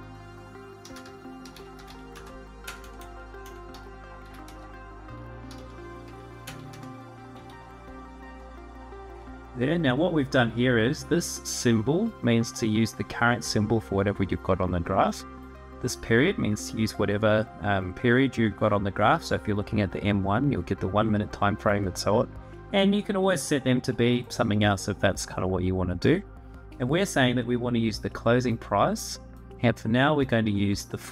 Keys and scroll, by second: 0.0-2.4 typing, 3.4-6.4 typing, 4.2 Return, 7.1 Tab.